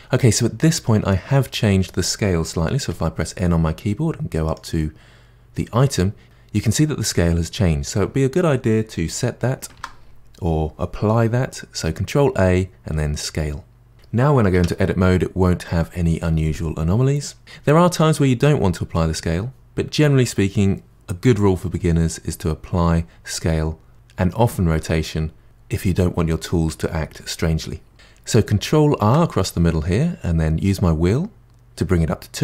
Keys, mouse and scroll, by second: 2.8 n, 4.4 click, 9.8 ctrl+a, 14.6 Tab, 29.0 ctrl+r.